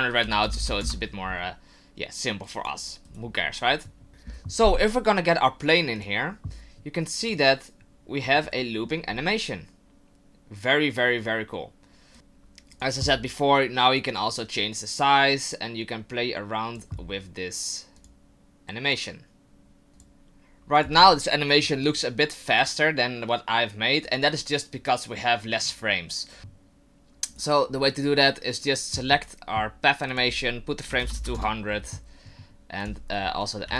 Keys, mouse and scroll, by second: 0.6 KP_0, 2.4 click, 3.1 right click, 4.1 click, 6.0 click, 7.2 click, 8.4 middle click, 9.1-10.2 scroll up 1, 10.2-11.4 scroll up 1, 12.1 click, 12.1 right click, 12.7 click, 14.0 click, 18.0 click, 19.9 ctrl+z, 19.9 right click, 19.9 click, 20.1 click, 20.7 click, 24.3 click, 26.4 right click, 27.7 right click, 28.2 right click, 30.1 click, 31.1 KP_0, 32.8 click.